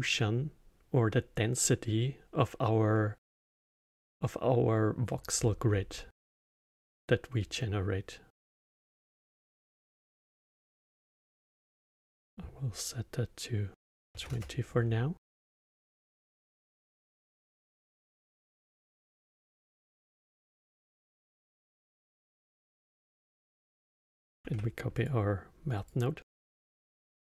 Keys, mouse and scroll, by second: 3.2-6.2 middle drag, 8.5-11.6 middle drag, 11.6-14.8 drag, 16.4-17.1 middle drag, 17.1 drag, 18.2-20.8 drag, 20.8-23.3 middle drag, 23.3 click, 24.4 shift+d, 25.7 click, 26.2-27.3 drag.